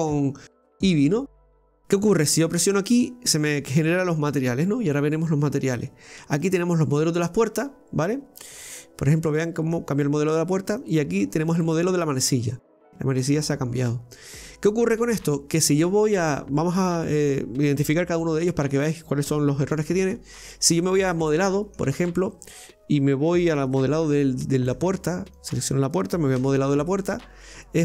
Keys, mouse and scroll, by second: 0.8 click, 2.8 click, 6.4-9.4 drag, 9.4-10.8 middle drag, 10.8-13.8 drag, 20.9 middle click, 22.2 right click, 24.1 Tab, 24.6 middle click, 24.7-25.2 scroll up 2, 25.2 right click, 26.9 middle click.